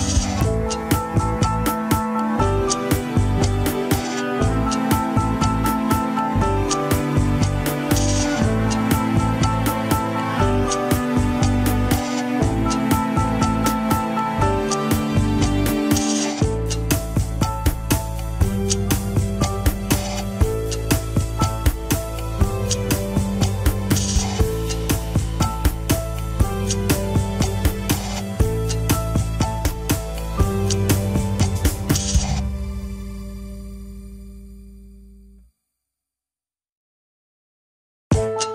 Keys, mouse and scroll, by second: 1.7 click, 2.4 g, 4.4 click, 5.3 g, 6.2 scroll down 2, 6.2-8.7 middle drag, 10.7 scroll down 1, 11.2 ctrl+Tab, 11.2 middle click, 11.7 KP_3, 12.1 shift+middle click, 12.4-13.0 scroll up 2, 13.0 ctrl+s, 13.1 click, 13.8 Tab, 14.2 scroll up 1, 14.5 click, 15.1 click, 16.7 Tab, 17.1-17.7 middle drag, 17.7 scroll up 1, 18.0-19.8 middle drag, 19.8-20.3 scroll down 3, 20.3-21.6 middle drag, 21.6-24.2 drag, 29.8-32.3 drag, 32.5-35.0 middle drag, 37.8 scroll down 3, 37.9 KP_1.